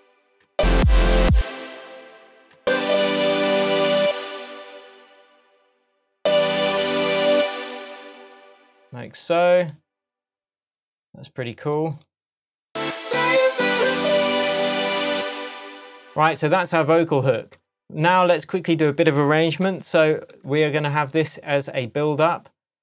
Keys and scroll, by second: 0.5 space, 2.5 space, 4.0 space, 6.1 space, 7.6 space, 15.5 space, 19.7 super+i.